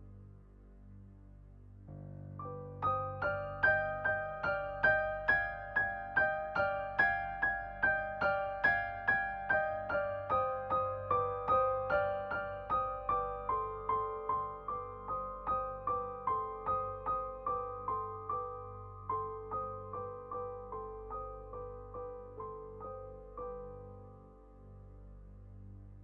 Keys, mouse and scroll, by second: 0.7 shift+a, 2.9 shift+a, 6.0 scroll up 2, 6.6 KP_4, 7.4 scroll down 2, 7.6 g, 8.8-9.1 middle drag, 9.1 KP_7, 9.3-9.6 scroll down 1, 9.6 r, 11.5 shift+middle drag, 11.6 scroll up 2, 12.4 click, 12.6-12.9 scroll up 1, 12.9 click, 13.5 KP_0, 14.6 click, 16.1 click, 17.0 scroll down 3, 17.2 middle click, 17.4 KP_7, 18.3 KP_3, 19.1 shift+d, 19.6 alt+r, 21.3 KP_7, 22.0 r, 22.8 shift+middle click, 23.0 r, 25.8-26.0 drag.